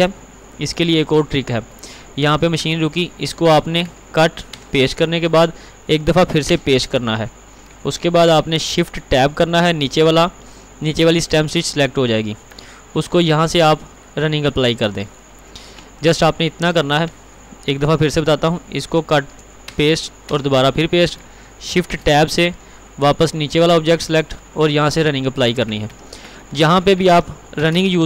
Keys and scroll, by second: 0.7 ctrl+t, 3.9 ctrl+x, 17.0 ctrl+t, 19.1 ctrl+x, 25.9 ctrl+t, 27.1 ctrl+r, 27.6 ctrl+v.